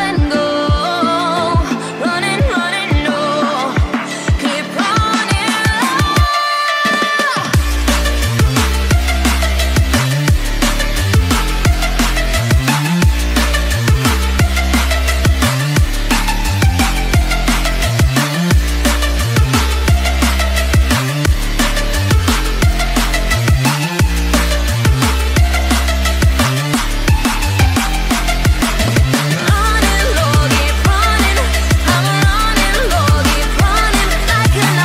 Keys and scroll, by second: 5.3 ctrl+0.